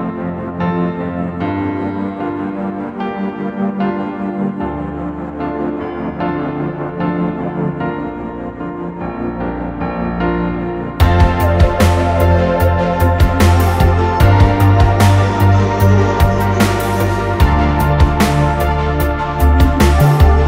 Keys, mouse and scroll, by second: 0.0 scroll down 1, 0.1 middle click, 1.5 space, 3.4 double click, 4.9 Delete, 5.5 middle click, 5.8 scroll up 1, 6.3 scroll down 1, 6.6 scroll up 1, 6.8 middle click, 7.6 r, 7.6 scroll up 1, 9.0 Escape, 9.1 space, 10.1 r, 13.4 scroll up 1, 14.2 space, 14.3 double click, 14.4 right click, 15.6 scroll down 1, 16.4 scroll up 1, 17.2 m, 17.5-17.8 scroll down 1.